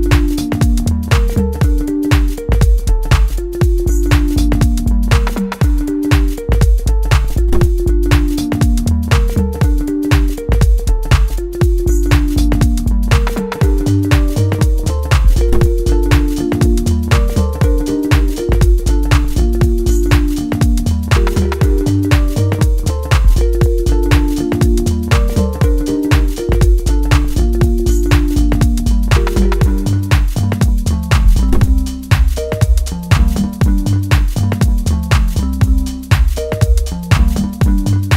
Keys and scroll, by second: 6.8 F3, 7.9 F4, 15.9 F2, 22.7 ctrl+space, 30.2 F3, 34.7 ctrl+space, 37.2 ctrl+space.